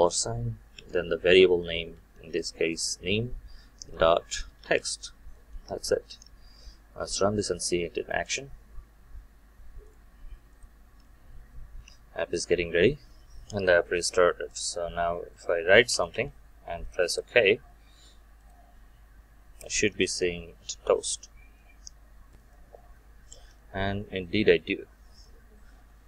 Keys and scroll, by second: 5.5 Return, 8.2 shift+F9.